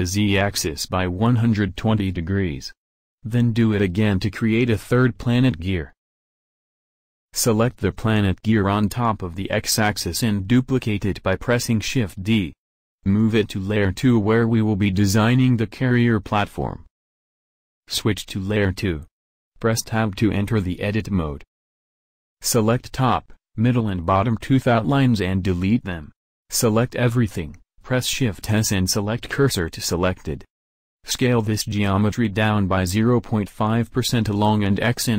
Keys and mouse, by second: 0.7-2.5 drag, 3.9 middle click, 4.3 middle click, 5.2 middle click, 5.8 middle click, 6.4 KP_7, 6.6 KP_1, 7.1 KP_1, 7.5 KP_7, 9.3 shift+d, 10.3 m, 18.8 Tab, 19.6 a, 23.2 x, 25.8 Tab, 26.7 Tab, 28.4 a, 28.4 shift+s, 29.9 KP_1, 31.7 s.